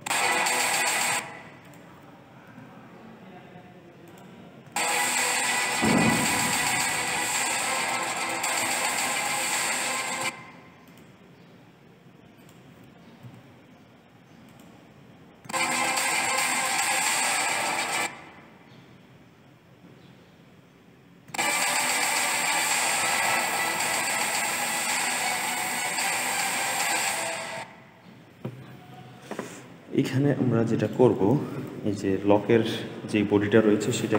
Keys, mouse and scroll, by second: 0.4 click, 1.0 space, 1.5 click, 2.4 g, 4.7 space, 10.1 space, 10.7 click, 12.3 click, 13.1 g, 15.3 space, 17.8 space, 21.1 space, 27.4 space, 29.7-30.7 scroll up 6, 30.7 click.